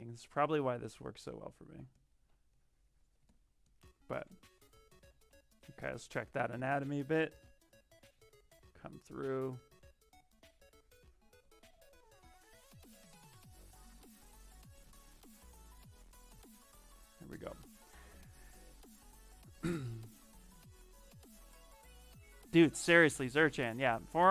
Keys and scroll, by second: 4.1-6.9 typing.